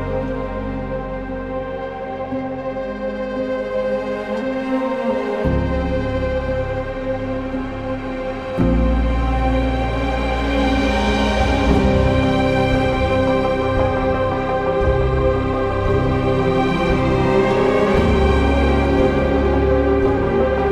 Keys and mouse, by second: 0.7 click, 1.9 ctrl+r, 2.9 click, 3.2 2, 4.8 alt+shift+click, 6.4 alt+shift+click, 10.5 ctrl+click, 12.9 ctrl+click, 17.0 ctrl+b, 19.1 click, 20.6 3.